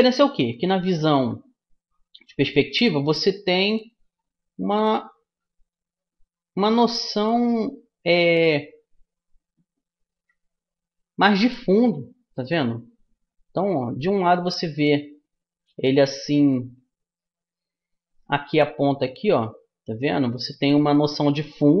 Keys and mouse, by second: 10.1 KP_5.